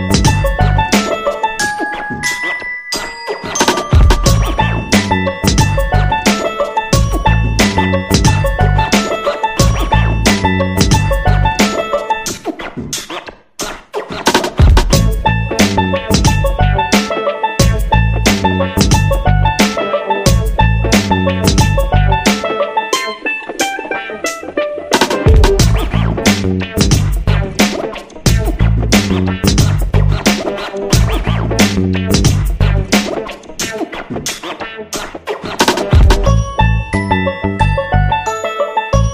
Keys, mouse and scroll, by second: 12.4 click, 13.2 Escape, 14.1 click, 15.8 Delete, 16.2-29.3 drag, 29.4-29.7 ctrl+scroll up 1, 31.0 click.